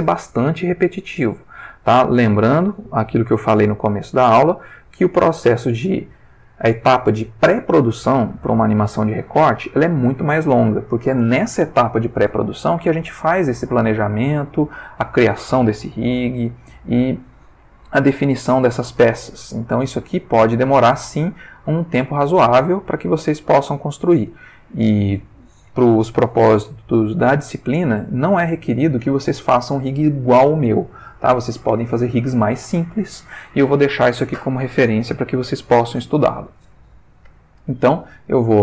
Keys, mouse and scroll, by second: 19.5 ctrl+middle click, 20.7 click, 21.6 r, 22.5 Escape, 23.4 click, 24.1 r, 25.0 Escape.